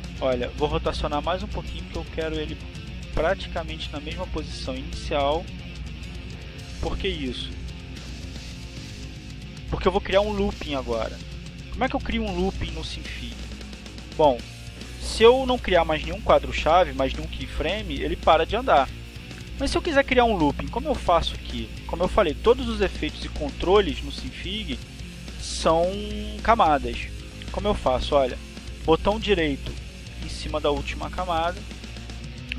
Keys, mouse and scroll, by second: 0.6-3.5 drag, 4.5-8.2 drag, 8.9-26.8 drag.